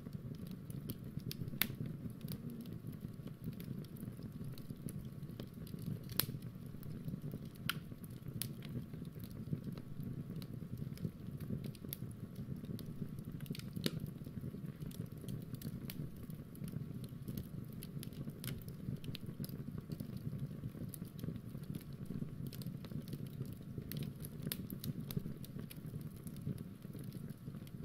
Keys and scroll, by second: 5.8 ctrl+alt+r, 11.2 Return, 14.7 ctrl+[, 14.8 k, 14.9 k, 16.6-22.1 typing, 24.8-25.8 typing, 27.6-27.8 typing.